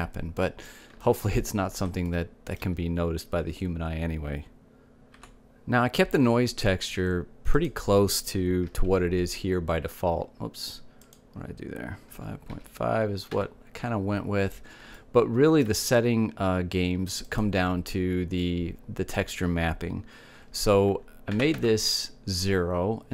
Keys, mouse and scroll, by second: 1.5-3.5 middle drag, 4.1-5.8 middle drag, 9.0-10.9 drag, 10.5 KP_Decimal, 12.4-14.2 drag, 16.4-18.2 middle drag, 18.7-20.5 drag.